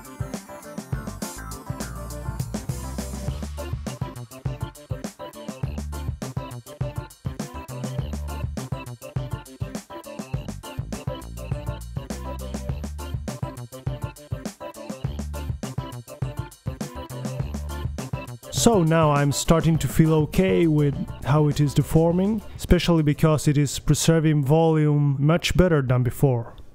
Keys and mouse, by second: 0.0 right click, 0.7 click, 1.1 click, 1.4 middle click, 1.8 middle click, 1.9 click, 2.1 middle click, 2.3-2.7 right drag, 2.4 g, 4.3-4.8 middle drag, 4.5 g, 5.4 middle drag, 5.6 drag, 5.7 g, 6.2 click, 6.3 g, 7.0 middle drag, 7.2 click, 7.4 g, 7.4 right click, 7.7 middle click, 7.8 right click, 7.9 alt+g, 8.6 alt+g, 8.6 click, 8.9 click, 9.3 right click, 9.6 click, 9.7 BackSpace, 10.2 middle click, 10.4-10.8 right drag, 10.6 g, 12.4-12.7 middle drag, 12.7 drag, 12.7 KP_3, 12.9 middle drag, 13.2-13.5 drag, 13.4 g, 13.6-14.0 drag, 13.8 g, 14.3-14.8 middle drag, 14.4 g, 14.8 right click, 15.4 middle click, 15.9-16.2 middle drag, 16.2 right drag, 16.3 g, 16.5 drag, 17.3 middle click, 17.8-18.3 drag, 17.8 KP_3, 18.0 g, 18.6 middle click, 18.9 click, 19.1 BackSpace, 19.5 middle click, 19.8 KP_3, 20.0 click, 20.1-20.4 middle drag, 20.2 g, 20.4 click, 20.5-21.1 middle drag, 22.1-22.9 middle drag, 23.0 KP_3, 23.1-23.5 middle drag, 23.4 g, 23.9 middle click, 24.0-24.4 drag, 24.6 KP_3, 25.3 alt+g.